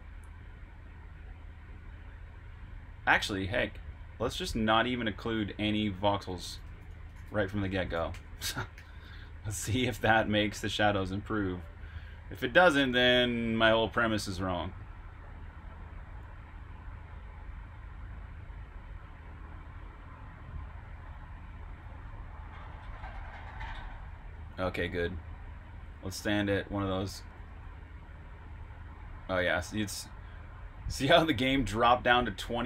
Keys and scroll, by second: 0.0-0.3 typing, 5.0-9.9 typing, 24.3-26.4 typing, 27.4 e.